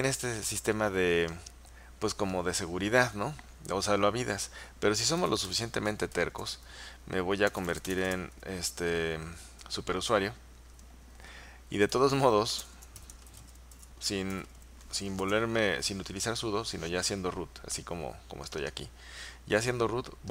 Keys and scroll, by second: 5.3-6.4 typing, 7.5-8.3 typing, 11.8-15.3 typing.